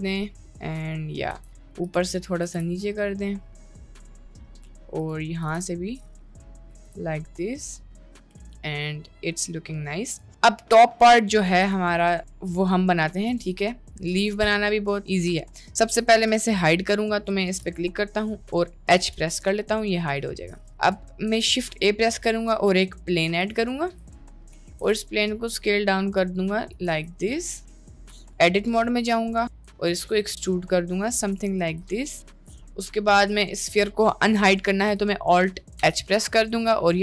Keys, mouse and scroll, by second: 0.0-1.3 middle drag, 1.4 Tab, 2.2 middle click, 2.5 g, 4.5 middle click, 5.5 g, 6.9 Tab, 7.2-8.2 middle drag, 8.4 click, 8.6-10.2 middle drag, 10.4 middle click, 12.4-12.8 shift+middle drag, 13.1-13.5 shift+middle drag, 14.3 click, 14.7 shift+middle click, 19.1 h, 20.4-20.8 shift+middle drag, 21.3 shift+a, 24.4 middle click, 24.9 s, 27.8 click, 28.3 Tab, 29.6 e, 31.6 Tab, 35.8 alt+h, 36.7-37.0 middle drag.